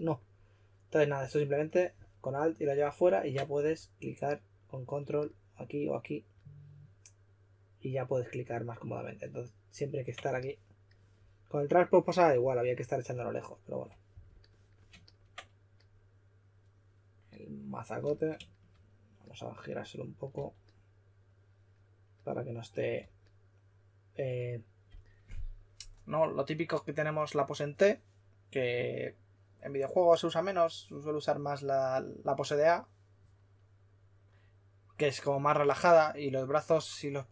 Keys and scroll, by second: 3.6 w, 20.3 w, 22.9 typing.